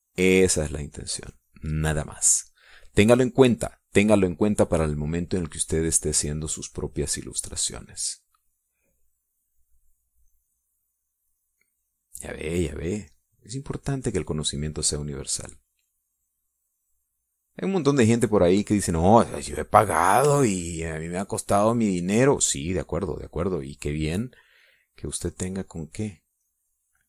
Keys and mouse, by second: 3.2 middle click, 6.7-9.4 drag, 11.2-13.2 drag, 14.6-16.9 drag, 17.1-18.4 drag, 18.8 middle click, 20.4 middle click, 21.4-23.6 shift+drag, 25.2-27.0 drag.